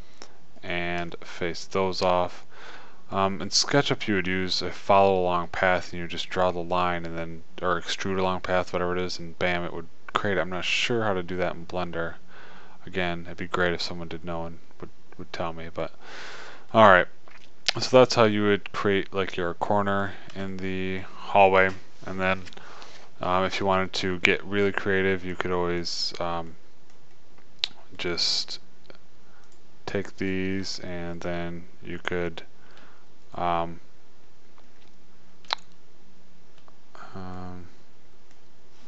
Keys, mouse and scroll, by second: 1.1 click, 2.2 click, 2.5 f, 2.9 click, 3.5 click, 9.8 middle click, 10.6-13.0 middle drag, 16.5-19.0 middle drag, 19.8-21.0 middle drag, 22.7-25.0 middle drag, 29.8 click, 33.4-35.4 middle drag, 37.8 middle click.